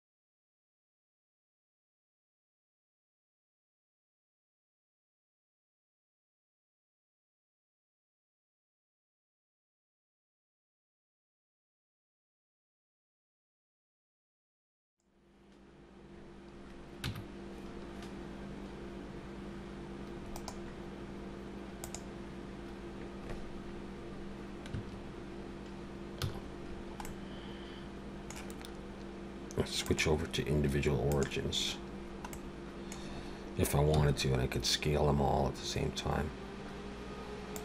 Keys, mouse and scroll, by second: 0.5 click, 0.8 middle click, 1.2 click, 1.7 middle click, 3.3 ctrl+z, 3.4 ctrl+z, 3.6 ctrl+z, 3.7 ctrl+z, 3.9 ctrl+z, 5.3 r, 6.5 middle click, 6.8 middle click, 7.0 Tab, 7.2 middle click, 7.7 click, 8.5 scroll up 1, 8.5 KP_3, 8.8 r, 9.5 middle click, 10.1 click, 10.7 middle click, 11.1 r, 11.8 alt+a, 11.8 scroll down 4, 11.9 middle click, 13.6 scroll up 2, 14.2 click, 14.6 shift+click, 15.3 alt+a, 17.1 Tab, 20.3 right click, 24.8 Tab, 26.1 a, 26.7-27.0 scroll down 2, 27.0 middle click, 29.8 click, 32.3 middle click, 33.2-34.0 scroll up 1, 34.0 s.